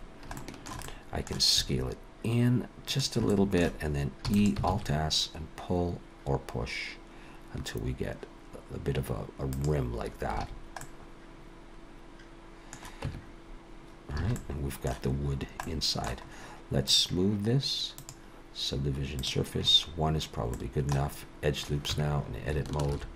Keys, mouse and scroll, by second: 0.1-0.4 scroll down 1, 0.4 shift+middle click, 0.8 middle click, 1.6 s, 3.3 middle click, 4.3 e, 4.7 alt+s, 10.4 alt+a, 10.8 middle click, 13.0 Tab, 14.2 alt+a, 14.4 middle click, 15.3 scroll down 2, 15.6 middle click, 16.3-16.9 scroll up 1, 16.9 click, 16.9 scroll up 1, 18.0 click, 20.5 middle click, 21.1-21.9 scroll up 2, 21.9 Tab, 22.9 ctrl+r.